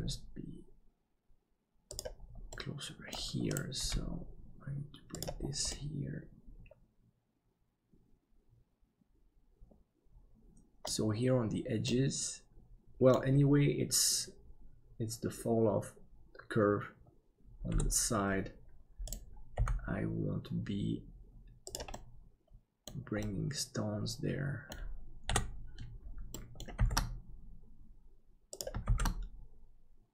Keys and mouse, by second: 2.5 middle click, 3.8 g, 5.8-10.8 middle drag, 11.9-13.2 middle drag, 17.7 KP_7, 19.5 g, 21.9-22.9 middle drag, 23.3-24.8 middle drag, 25.3 KP_7, 26.4 shift+middle click, 26.8 shift+d.